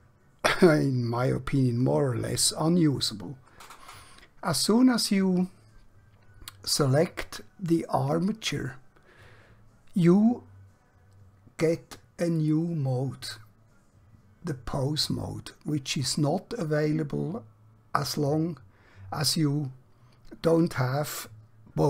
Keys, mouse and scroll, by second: 12.3 click, 18.0 click, 20.5 click.